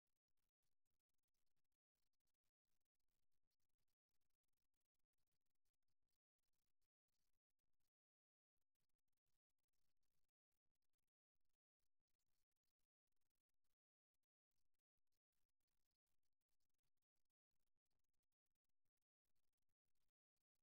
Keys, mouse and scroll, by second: 1.2-3.0 drag, 4.4 e, 6.4 e, 10.4 r, 13.0 g, 16.2 e, 20.0 r.